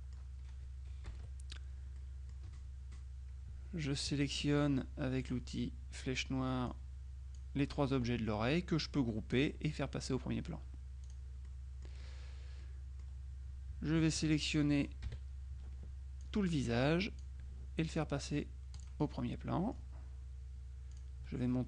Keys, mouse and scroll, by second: 1.2 KP_Subtract, 2.1 middle click, 4.2 F1, 5.3 click, 6.7 click, 9.4 click, 11.1 click, 11.5 right click, 12.7 middle click, 14.4 shift+click, 15.1 KP_Subtract, 16.3-17.8 drag, 18.9 click, 19.4 middle click, 21.0 click.